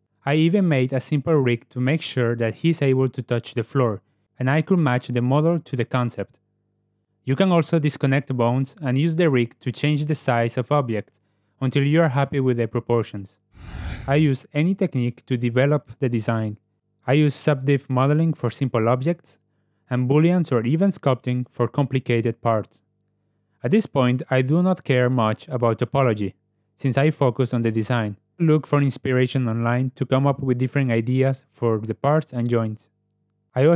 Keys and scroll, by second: 0.0 r, 1.2 r, 7.0 g, 10.3 s, 12.9 s, 15.7 i, 16.6 e, 17.2 e, 17.5 ctrl+alt+s, 18.3 alt+s, 18.7 Tab, 19.4 Tab, 19.7 g, 21.1 g, 21.7 f, 23.5 Tab, 28.2 alt+F8, 31.7 ctrl+v, 33.3 ctrl+w.